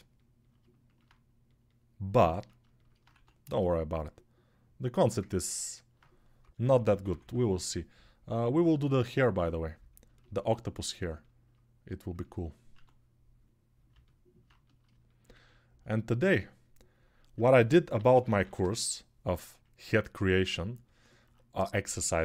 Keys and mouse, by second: 2.9 1, 5.6-9.8 drag, 6.2-7.0 typing, 9.8 ctrl+alt+right click, 9.9 ctrl+alt+click, 10.0 alt+right click, 10.9-22.2 ctrl+alt+drag, 12.5 1, 17.3-18.3 typing.